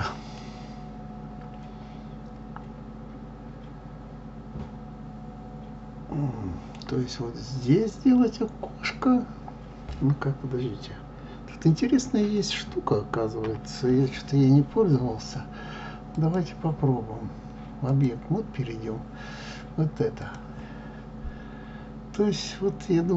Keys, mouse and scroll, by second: 13.4 KP_3, 17.8-23.1 drag.